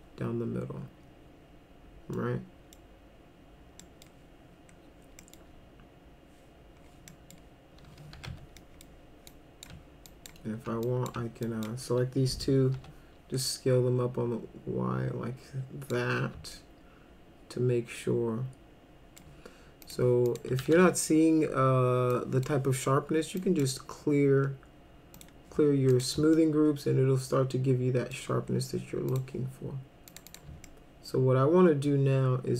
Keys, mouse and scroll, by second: 2.1 middle click, 3.8 middle click, 5.2 middle click, 7.1 middle click, 7.9-8.8 typing, 8.6 middle drag, 9.3 click, 10.0 ctrl+click, 10.8 click, 11.5 ctrl+click, 12.8 r, 13.4-15.9 drag, 16.5-19.2 alt+middle drag, 19.8 click, 20.3 click, 20.6 ctrl+a, 22.1 click, 23.4 click, 25.1 click, 25.9 click, 26.4-28.1 alt+middle drag, 29.1 click, 30.1 click, 30.3 click, 30.7-32.5 alt+middle drag.